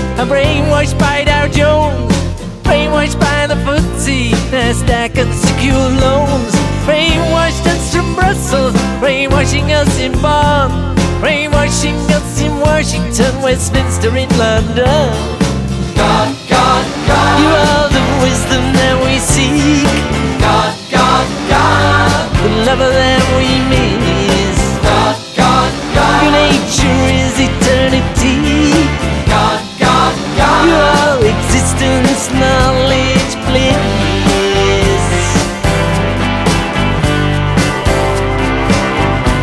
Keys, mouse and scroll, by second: 1.0 click, 2.5 click, 4.1 ctrl+z, 5.5 click, 5.8 click, 7.2 click, 8.8 click, 13.2 click, 15.9 ctrl+a, 17.0-23.9 drag, 24.6-25.0 ctrl+scroll up 2, 25.9 middle click, 26.7-27.4 ctrl+scroll down 6, 28.0 ctrl+scroll up 2, 28.9 ctrl+scroll down 2, 31.5 click, 32.5-35.0 typing, 36.1 click, 38.2 click.